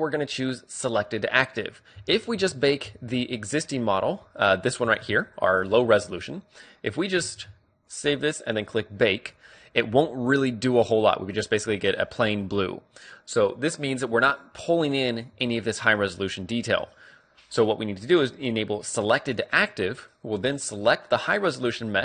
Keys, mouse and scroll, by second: 2.1 z, 2.5 z, 3.0 z, 3.7-5.3 right drag, 5.0 z, 5.3-7.2 middle drag, 7.5 ctrl+w, 9.6-10.8 drag, 19.3-21.0 drag, 21.2-22.0 right drag.